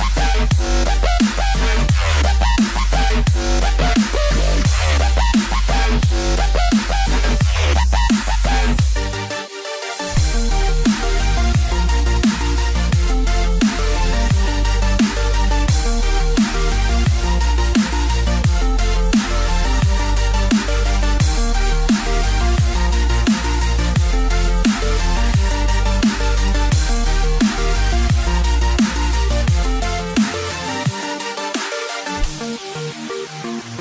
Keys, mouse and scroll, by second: 0.8 middle click, 0.8 scroll up 1, 1.7 scroll up 2, 2.0 middle click, 2.5 scroll down 2, 3.1 click, 4.7 KP_Divide, 6.6 KP_Divide, 6.6 click, 8.3 click, 11.0 click, 11.1 KP_3, 13.4 KP_3, 13.4 r, 19.8 scroll down 2, 21.4 click, 23.0 click, 23.8 click, 23.9 s, 26.7 click, 29.4 click, 29.5 s, 32.4 scroll up 2.